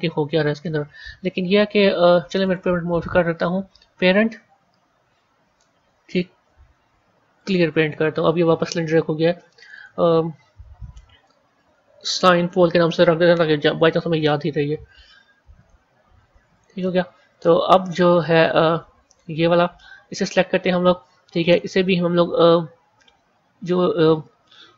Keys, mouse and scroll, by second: 2.3-5.4 drag, 9.5 click, 9.6-12.6 drag, 15.4 click, 16.4 click, 17.2 click, 17.6-18.9 middle drag, 18.9 click, 21.3-24.3 drag.